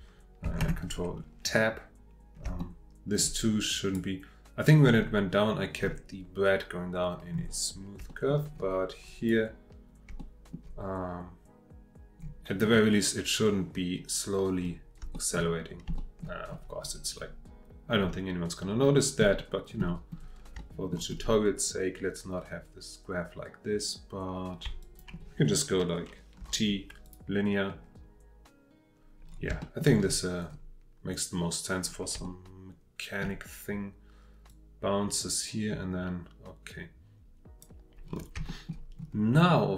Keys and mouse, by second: 0.6 ctrl+Tab, 2.7 shift+middle click, 3.7 click, 5.8-6.3 middle drag, 8.1 shift+middle click, 9.0-9.3 drag, 10.2 shift+middle click, 15.1 shift+middle click, 16.0 shift+middle click, 20.7 shift+middle click, 24.8 shift+drag, 26.4 t, 29.6 shift+middle click, 32.2-33.2 shift+middle drag, 34.5-37.6 drag, 38.5 shift+middle click, 39.5-39.7 drag.